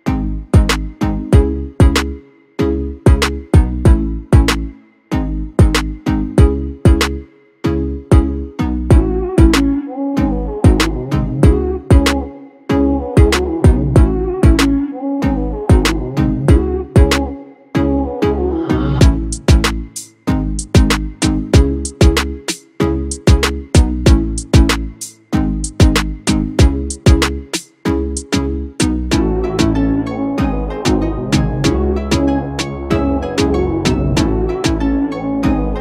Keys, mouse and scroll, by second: 10.1 ctrl+z, 33.9 Delete.